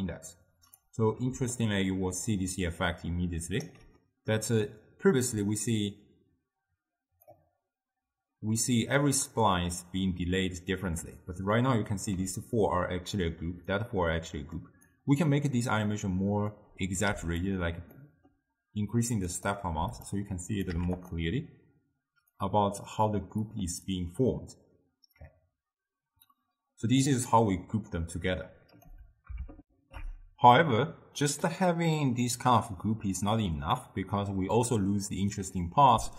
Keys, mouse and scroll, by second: 1.4 d, 1.6-3.8 right drag, 3.8 d, 4.4 d, 4.5-7.6 drag, 12.2 d, 12.4-13.2 drag, 13.2-13.7 d, 13.9 click, 14.6 d, 14.9 right click, 15.6 d, 16.6 click, 18.1-19.4 middle drag, 19.4 click, 20.6 click, 22.5-27.1 drag, 28.5-29.7 drag, 29.7 ctrl+alt+shift+q, 35.6-36.1 middle drag.